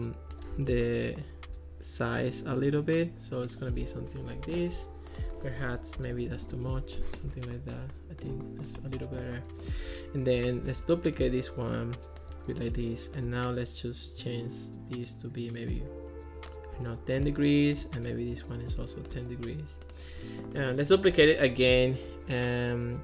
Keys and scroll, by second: 5.8-6.7 typing, 10.7 super+d, 21.1 super+d.